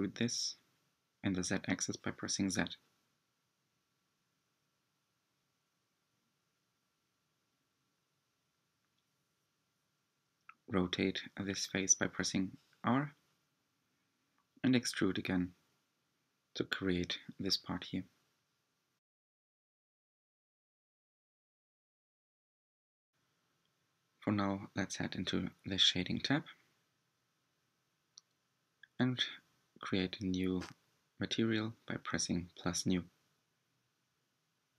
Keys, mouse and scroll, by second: 3.3 g, 6.8 r, 8.9 e, 12.4 r, 15.3 Tab, 15.7-16.3 scroll down 4, 16.3-17.4 middle drag, 17.4-18.6 scroll down 4, 18.6-21.7 middle drag, 22.7 click, 24.0-24.4 scroll up 6, 28.1 click, 34.3-34.7 drag.